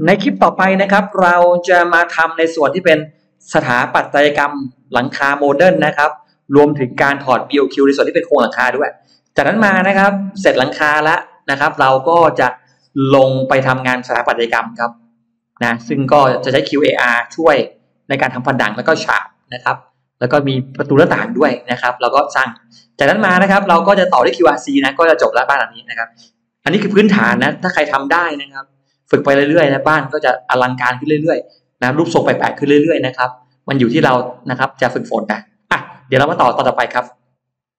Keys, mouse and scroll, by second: 0.0 scroll down 1, 0.3-1.6 scroll up 5, 1.0 middle click, 1.7 middle click, 1.9 scroll down 2, 2.9 click, 3.3 middle click, 4.1-4.5 scroll up 2, 4.8 scroll down 2, 5.0 scroll up 2, 5.1 middle click, 5.6 scroll down 2, 5.9 scroll up 2.